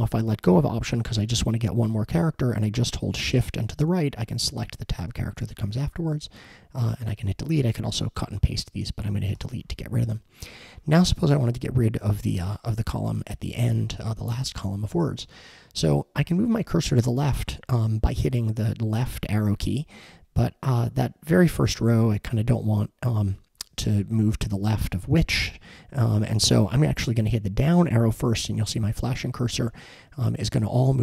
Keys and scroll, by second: 3.1 shift+Right, 9.4 BackSpace.